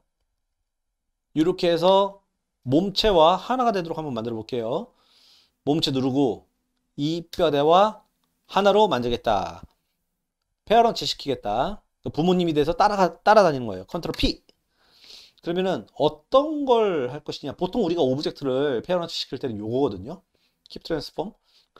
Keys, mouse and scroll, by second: 2.6-3.0 middle drag, 4.6 click, 14.1 ctrl+p.